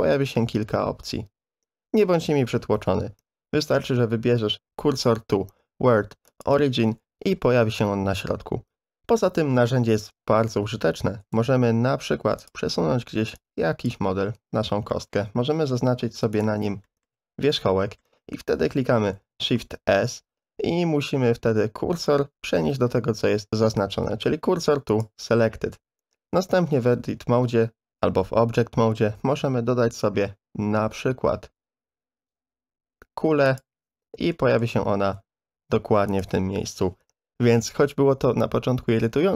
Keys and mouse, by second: 11.3 shift+a, 13.3 click, 14.2 Tab, 14.9 middle click, 15.5 1, 16.3 click, 16.8 shift+click, 17.7 middle click, 19.2 shift+s, 26.3 Tab, 29.2 shift+a, 34.3-34.6 shift+drag, 35.0 s.